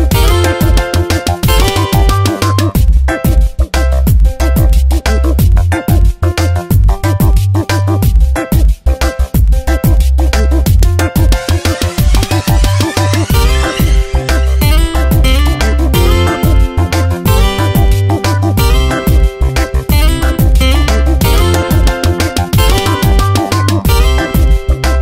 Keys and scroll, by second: 0.2 ', 1.0 space, 1.8 alt+Right, 2.1 shift+Down, 2.7 ctrl+t, 6.2 Return, 8.4 ctrl+j, 10.0 space, 13.2 Return, 14.7 alt+Right, 16.6 ctrl+t, 18.5 Return, 19.1 Up, 19.7 space, 21.0 alt+Right, 22.9 Up, 23.3 Left, 23.5 Down, 23.9 space, 24.6 ctrl+t.